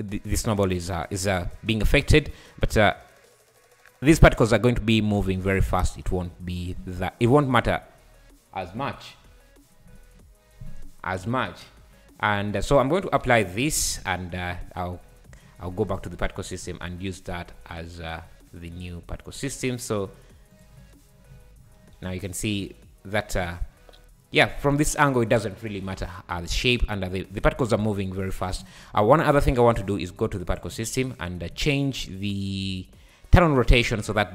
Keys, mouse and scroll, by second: 2.8-5.9 drag, 11.2 `, 13.6 ctrl+a, 14.0 `, 14.3 scroll up 1, 14.5 `, 15.1 scroll down 4, 15.3 `, 15.7-16.3 scroll down 7, 15.9 `, 16.4 scroll up 10, 17.5 scroll down 1, 18.1 scroll up 5, 19.6 click, 19.9-20.5 scroll down 4, 20.5 click, 20.8-22.6 typing, 21.2 scroll up 1, 28.6 space, 29.1 click, 30.5-31.6 drag, 31.6 scroll down 5, 33.4 click, 33.7-34.0 drag, 34.0-34.3 scroll down 6.